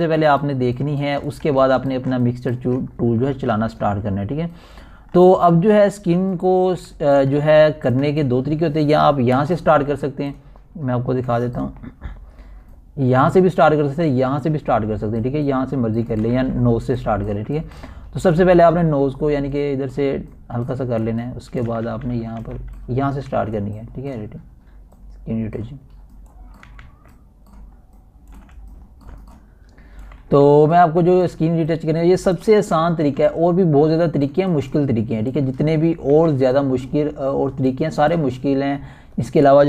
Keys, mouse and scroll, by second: 2.1 alt+scroll down 1, 3.0 alt+scroll down 1, 3.8 click, 4.3 ctrl+alt+scroll up 1, 6.2-6.5 scroll up 2, 6.8 alt+shift+scroll down 1, 7.7 alt+shift+scroll down 1, 7.7 scroll up 1, 8.7 alt+shift+scroll down 2, 10.1-10.5 scroll up 1, 11.3 scroll down 1, 12.1 scroll, 13.1 scroll up 1, 13.9-25.8 typing, 16.5 scroll down 1, 17.7 scroll down 1, 18.4 scroll up 1, 20.9-23.9 drag, 23.9 scroll down 1, 25.5 scroll up 1, 26.2-29.1 drag, 29.1 scroll down 1, 29.3 typing, 29.7 click, 29.7 click, 31.0 ], 31.1-33.6 drag, 33.6 typing, 34.0 click, 35.1 ], 35.5 scroll up 1, 35.7 ], 36.0-38.7 drag, 38.7 typing, 39.2-39.6 drag.